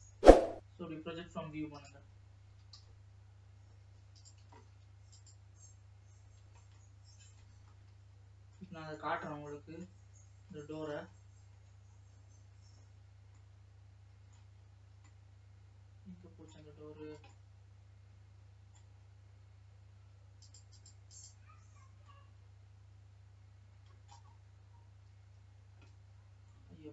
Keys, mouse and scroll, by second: 5.7 click, 7.1-9.2 middle drag, 9.2 shift+scroll down 1, 9.2-11.4 middle drag, 11.4-12.1 scroll up 6, 12.1-12.4 scroll down 2, 12.9-13.6 scroll down 3, 13.6-16.9 middle drag, 16.9 scroll down 3, 17.7-19.3 middle drag, 19.3-20.7 scroll up 2, 21.1-26.9 drag.